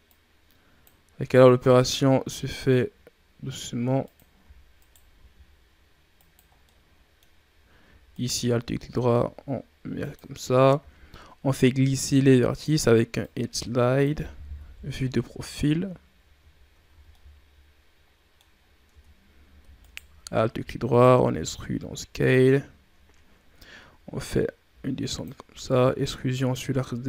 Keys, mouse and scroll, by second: 0.0-2.0 drag, 2.0 s, 4.3 e, 5.0 s, 6.4 scroll down 1, 6.6 middle click, 7.4-8.0 scroll up 1, 8.0 alt+right click, 8.6 s, 10.6 ctrl+e, 14.5 KP_3, 14.9 Tab, 15.6 scroll down 1, 16.5 shift+scroll up 3, 16.8 a, 17.0-18.4 middle drag, 18.4-18.7 scroll up 5, 18.8 Tab, 19.7 alt+right click, 20.5 e, 21.1 s, 24.1-25.5 drag, 25.5 e.